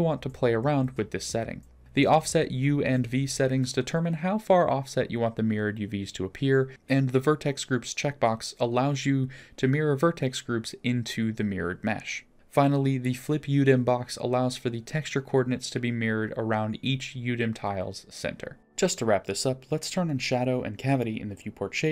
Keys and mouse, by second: 16.9 click, 17.5 click, 18.9-21.9 drag.